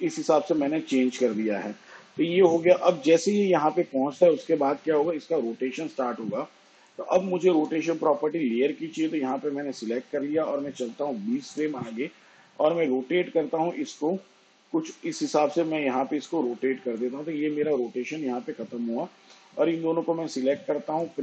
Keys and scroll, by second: 9.4 r, 12.4 shift+Page_Down.